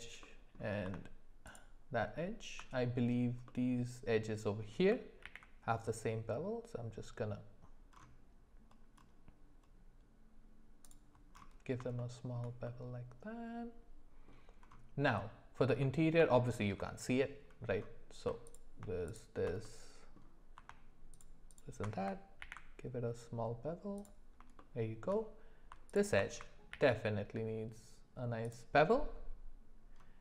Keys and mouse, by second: 0.2 middle click, 1.4 alt+shift+click, 3.5-4.7 middle drag, 5.3 ctrl+b, 12.0 shift+middle click, 12.6-14.3 middle drag, 19.1 alt+shift+click, 19.6 middle click, 21.1 alt+shift+click, 22.4 ctrl+b, 24.6 shift+middle click, 26.8 ctrl+b.